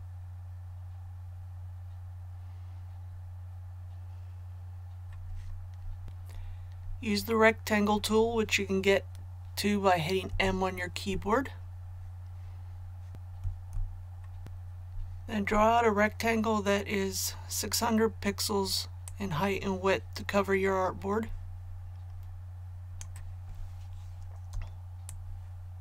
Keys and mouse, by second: 10.3 m, 13.1 click, 13.4 m, 19.0-24.0 drag, 25.0 space, 25.0 click.